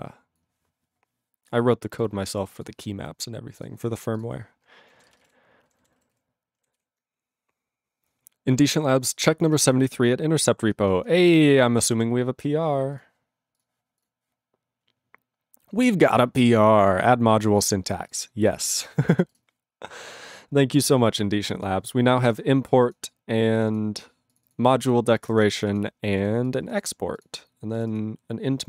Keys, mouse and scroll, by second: 3.6 ctrl+s, 4.1 click, 4.2 click, 4.9 ctrl+a, 5.0 ctrl+space, 5.1 ctrl+e, 5.2 ctrl+g, 5.6 ctrl+n, 5.8 ctrl+n, 6.1 ctrl+s, 6.7 ctrl+s.